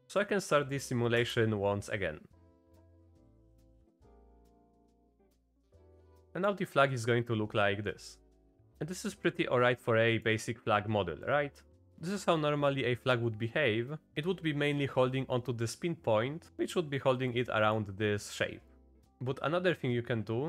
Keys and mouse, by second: 0.2 click, 1.2 space, 4.3-5.3 drag, 5.6 click, 8.1 drag, 8.7-10.3 drag, 8.7 space, 11.2-11.6 drag, 13.7 click, 16.6 drag, 17.3-17.8 drag, 18.7 click.